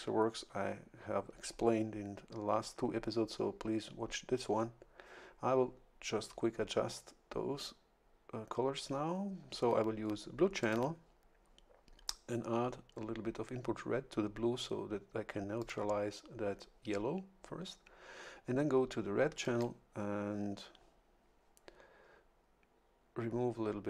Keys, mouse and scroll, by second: 10.6 click, 15.6 click, 19.4 click.